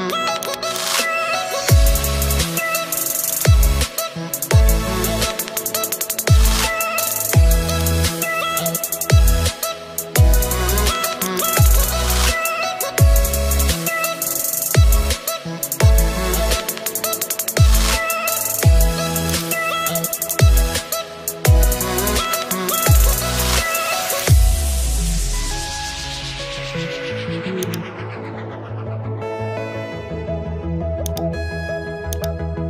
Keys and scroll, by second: 1.6 Return, 6.2 Return.